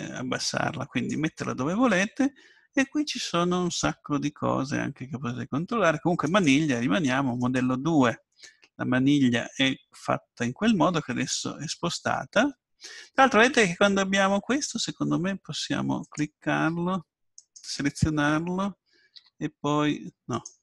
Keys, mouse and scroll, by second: 6.2-8.0 drag, 16.0-17.5 drag, 17.4-19.0 right drag, 19.2 g.